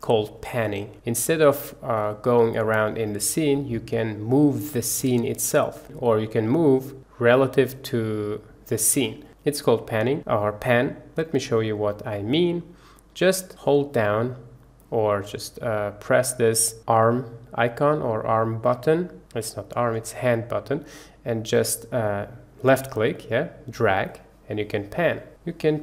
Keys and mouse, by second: 0.0 middle click, 1.4-1.9 middle drag, 2.3-3.9 middle drag, 16.5-19.4 drag, 20.3-25.4 drag, 25.4-25.8 middle drag.